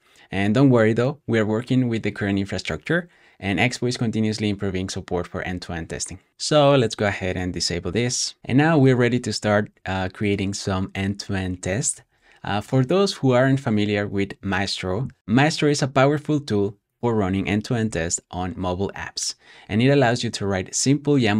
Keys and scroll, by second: 11.8 super+w.